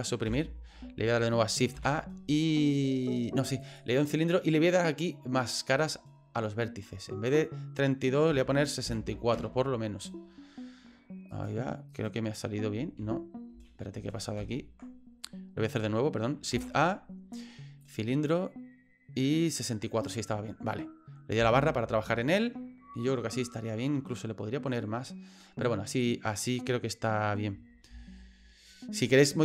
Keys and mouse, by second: 0.3 Delete, 1.7 shift+a, 7.3-10.4 drag, 11.3 right click, 11.9 right click, 12.9 ctrl+z, 13.5 ctrl+z, 13.9 ctrl+z, 14.4 ctrl+z, 16.5 shift+a, 21.4 KP_Divide, 27.9 F9.